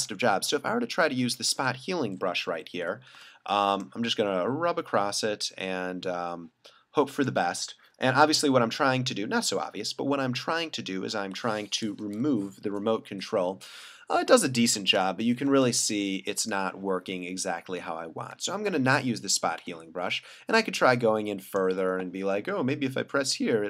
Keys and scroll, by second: 2.6 ], 3.2 [, 14.8 super+=, 15.7 space, 18.3 super+z, 19.6 super+z.